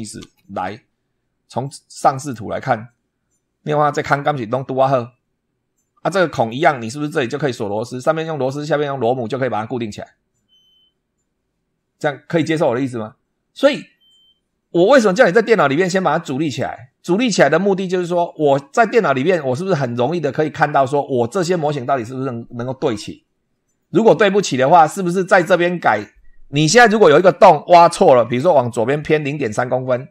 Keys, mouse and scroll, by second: 0.0 super+2, 2.0 click, 2.7 scroll up 1, 6.3 click, 15.0 scroll down 1, 27.2-27.6 scroll up 1.